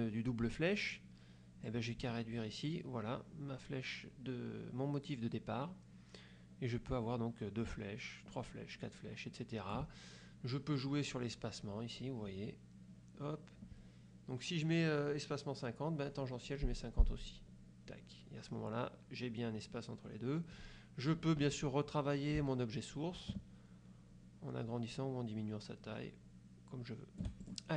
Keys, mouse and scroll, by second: 1.8-10.1 drag, 11.3-12.3 scroll up 2, 16.3-17.2 scroll up 6, 17.7 scroll up 2, 22.5-27.5 shift+drag.